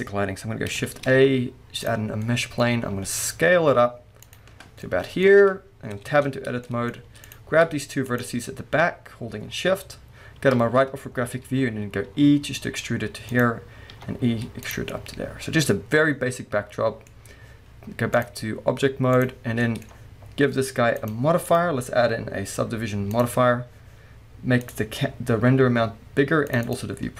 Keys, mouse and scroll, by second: 0.9 shift+a, 2.6 scroll down 2, 2.9 s, 4.3 click, 4.6 scroll down 1, 4.9-7.2 middle drag, 6.0 Tab, 7.2 click, 8.1 shift+click, 10.4 KP_3, 12.1 e, 13.4 click, 13.9 e, 14.7 click, 15.4-18.2 middle drag, 18.2-19.6 drag, 19.6-20.9 middle drag, 20.9 click, 21.5-24.8 drag, 26.5 click.